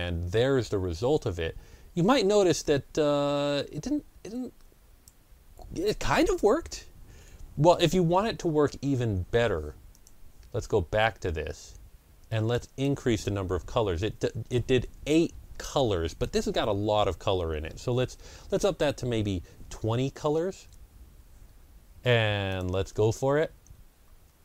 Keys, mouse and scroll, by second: 2.5-8.7 drag, 8.9 Delete, 8.9-12.4 drag, 12.4 Delete, 12.4 click, 19.3 KP_2, 19.4 KP_0, 20.5 Return, 22.4 click.